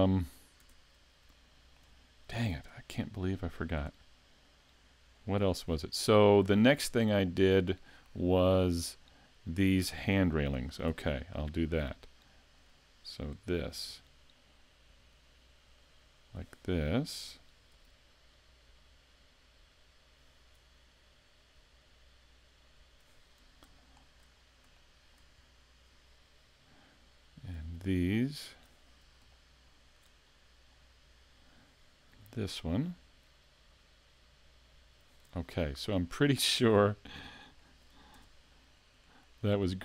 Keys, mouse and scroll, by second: 0.6 Tab, 1.3 shift+middle click, 2.5 Tab, 3.9 Tab, 5.4 Tab, 10.9 Tab, 11.4 scroll up 3, 11.8 shift+middle click, 13.9 l, 14.9 l, 16.2 l, 16.5 scroll down 1, 17.7 l, 18.6 l, 19.6 l, 21.6 l, 22.8 l, 23.3-23.8 scroll up 1, 23.8 shift+middle click, 24.3 scroll up 2, 24.7 shift+middle click, 25.4-25.9 scroll down 1, 27.6 l, 28.6 l, 29.3 shift+middle click, 30.2-31.7 scroll up 2, 32.1 l, 32.9 l, 33.6 l, 34.7 l, 35.3-35.7 scroll down 3, 36.1 shift+middle click, 36.8-37.6 scroll down 3, 37.6 shift+middle click, 38.2 Tab, 39.0 shift+middle click.